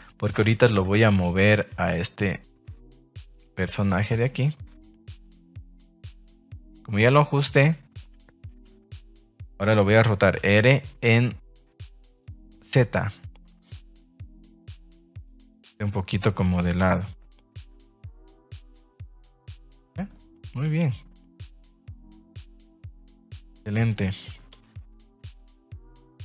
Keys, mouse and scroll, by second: 0.3 a, 0.8 a, 0.9 a, 3.9 b, 8.5 g, 9.2 Escape, 10.3 r, 10.9 z, 19.0 click, 19.5 a, 19.7 a, 20.1-22.5 middle drag, 23.4 ctrl+s, 23.6 middle click, 24.5 KP_0.